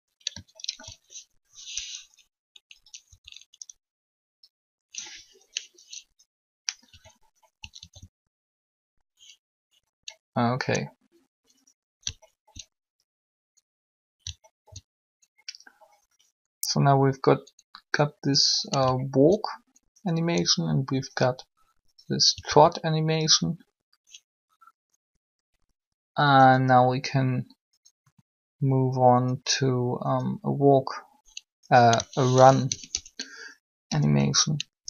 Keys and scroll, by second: 3.1 Up, 7.8 alt+a, 22.2 alt+a, 32.2-34.3 typing.